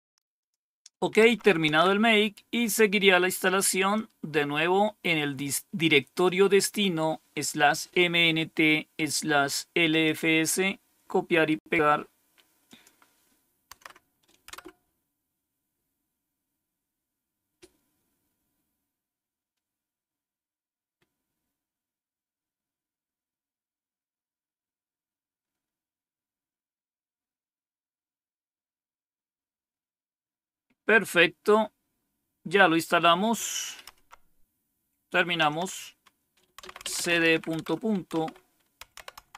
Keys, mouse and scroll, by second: 0.3 click, 1.1 Page_Up, 1.6 Page_Down, 3.8-6.2 drag, 8.9 right click, 9.8 click, 10.5 click, 11.4 right click, 12.6 click, 13.6 Tab, 14.4 Return, 35.3-39.3 typing.